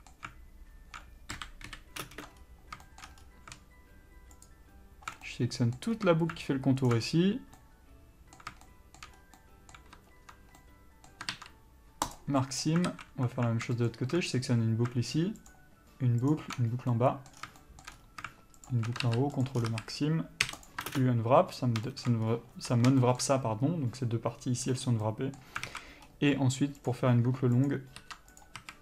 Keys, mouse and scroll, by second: 1.6 KP_4, 1.9 KP_1, 2.3 ctrl+space, 2.3-4.7 middle drag, 2.6-3.1 scroll up 2, 3.5-4.7 scroll up 2, 4.7 alt+shift+click, 5.5-7.1 middle drag, 6.2-7.1 scroll down 2, 7.1 alt+shift+click, 7.3-7.9 scroll down 2, 7.9-9.4 middle drag, 9.4 scroll up 2, 9.6-14.1 middle drag, 12.4 ctrl+e, 13.1 alt+a, 14.1 alt+shift+click, 17.1-18.9 middle drag, 17.6 scroll down 2, 18.2-18.8 scroll up 1, 18.9 alt+shift+click, 19.7 ctrl+e, 19.8 scroll down 1, 19.9 a, 20.9 u, 21.2 ctrl+space, 22.1 shift+middle click, 22.5-23.3 scroll up 1, 23.3 shift+middle click, 25.0 scroll up 1, 25.3 middle click, 25.9-27.1 alt+scroll up 2, 25.9 alt+a, 27.1 click, 28.0 ctrl+click, 28.7 ctrl+e.